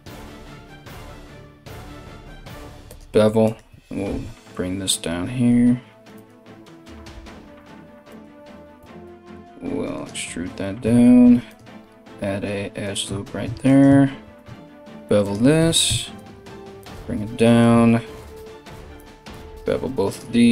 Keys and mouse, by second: 3.0 alt+right click, 3.7 g, 7.7 alt+right click, 7.9-20.5 alt+middle drag, 8.4 e, 10.8 ctrl+r, 13.2 right click, 13.8 ctrl+b, 15.2 g, 17.8 alt+right click, 18.2 alt+shift+right click, 18.9 ctrl+b.